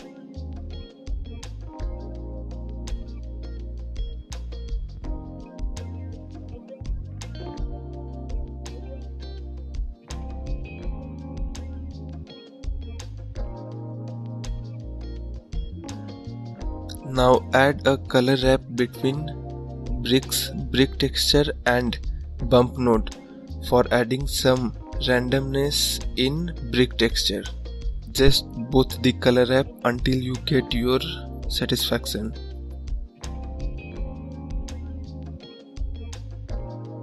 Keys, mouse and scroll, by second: 3.0-4.3 drag, 6.2-8.2 middle drag, 8.2 `, 8.6 scroll up 3, 11.0-12.5 drag, 13.5 scroll down 5, 15.5-23.9 drag, 25.4 scroll up 5, 26.0-27.5 drag, 28.6-35.8 drag.